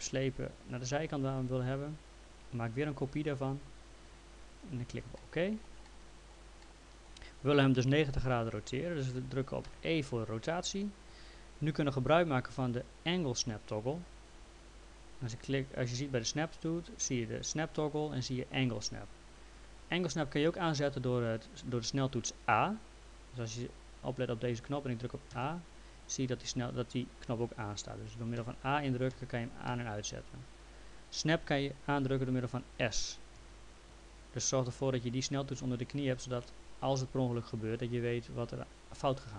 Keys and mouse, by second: 4.4 click, 5.2 alt+middle click, 6.6 alt+middle click, 9.7 e, 25.3 a, 28.4 a, 33.4 s.